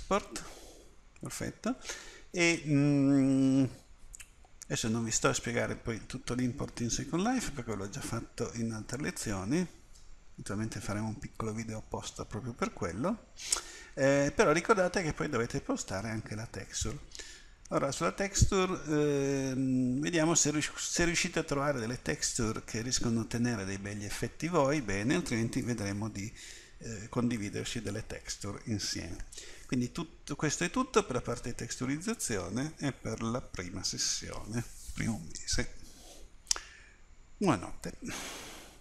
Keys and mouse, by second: 6.1 middle click.